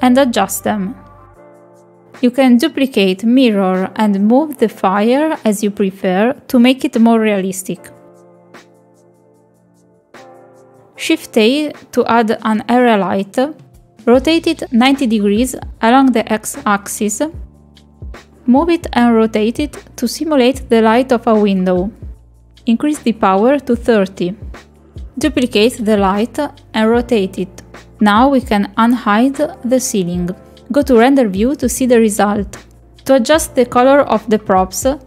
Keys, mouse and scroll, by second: 2.9 middle click, 3.2 shift+middle click, 3.9 click, 4.5 click, 4.8 middle click, 5.0 click, 5.2 r, 5.8 s, 6.2 click, 6.6 shift+d, 6.9 click, 7.5 click, 7.9 click, 8.3 r, 8.9 click, 9.2 middle click, 9.6 shift+d, 9.9 click, 10.3 middle click, 10.5 shift+middle click, 10.8 click, 11.1 click, 11.4 click, 11.7 KP_7, 12.3 shift+a, 15.3 r, 17.8 click, 18.2 click, 19.5 middle click, 20.0 KP_7, 20.8 shift+middle drag, 21.4 g, 22.8 r, 24.7 click, 25.1 shift+d, 25.4 g, 26.4 r, 27.4 KP_0, 28.8 click, 30.1 click, 32.4 click, 33.6 click.